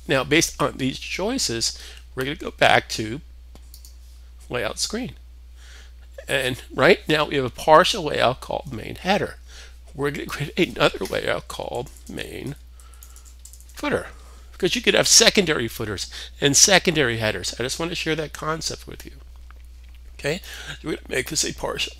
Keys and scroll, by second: 10.9-13.7 typing.